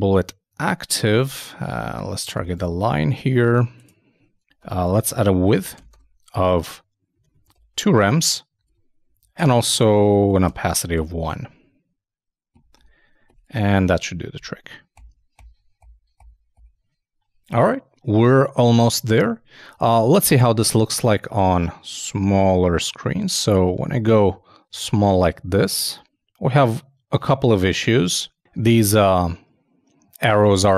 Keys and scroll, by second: 4.5 shift+super+Left, 4.6 shift+super+w, 5.1-6.0 typing, 8.7 super+Up, 9.0 super+Right, 9.4 super+Return, 11.0 super+i, 11.0 super+s, 11.2 super+Tab.